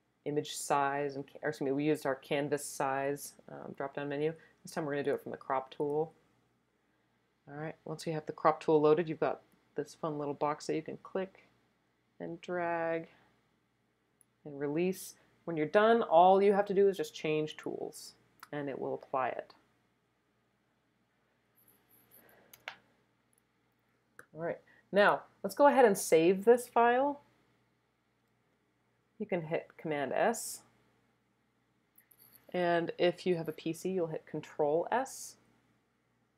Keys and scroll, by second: 22.5 Return, 30.3 super+s.